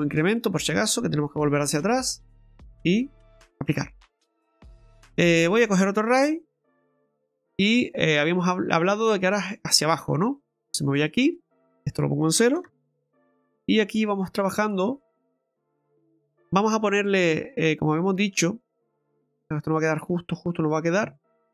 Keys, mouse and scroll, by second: 2.1 click, 5.5 click, 11.0 click, 11.8 click, 13.7 click, 17.6 click, 19.0 click, 19.2 click, 19.4 click, 19.7 click, 20.0 click.